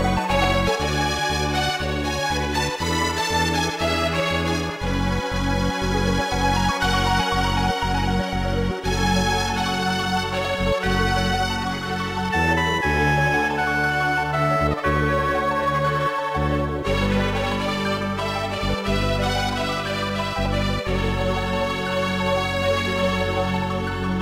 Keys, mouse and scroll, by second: 2.8-3.9 typing, 7.2 click, 7.6 scroll down 1, 8.3 3, 10.9 ctrl+z, 11.9 s, 16.5 click, 17.7 click, 18.2 click, 19.0-19.7 typing, 20.2 Return, 21.1 ctrl+z.